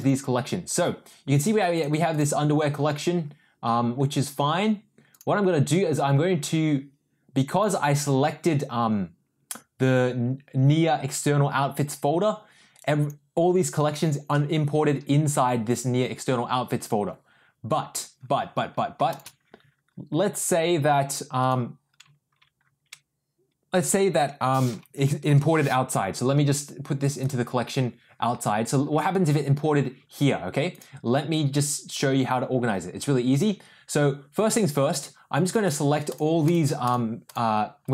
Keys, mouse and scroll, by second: 1.7 click, 7.6 click, 19.0 shift+click, 24.9 j, 25.2 m, 36.1 ctrl+click, 36.9 ctrl+click, 37.2 ctrl+click, 37.8 ctrl+click.